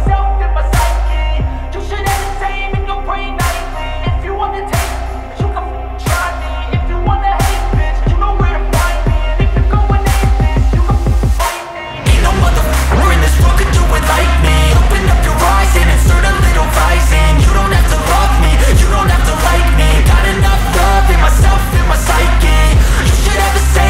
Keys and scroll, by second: 3.9 Delete, 17.4 ctrl+x, 23.4 Left.